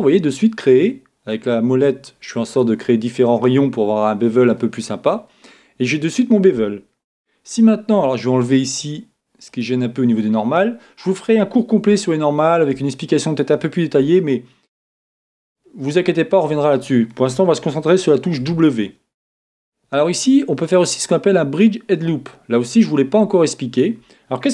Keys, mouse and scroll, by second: 2.6-4.4 drag, 3.1-4.9 middle drag, 6.1-7.8 middle drag, 9.5-11.2 drag, 10.1-16.9 middle drag, 11.3 click, 18.4 w, 23.8-24.5 middle drag.